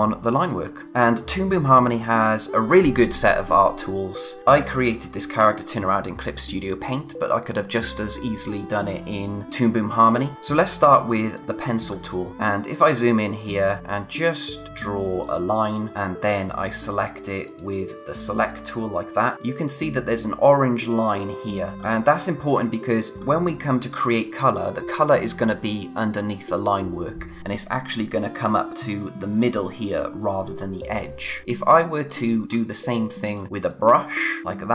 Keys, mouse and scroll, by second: 11.9 scroll up 1, 13.5 click, 17.4 click, 19.2-21.1 scroll up 1, 21.7-22.3 scroll down 1, 22.3-24.9 scroll up 1, 32.1 click, 32.4-33.3 scroll down 1, 33.7 click.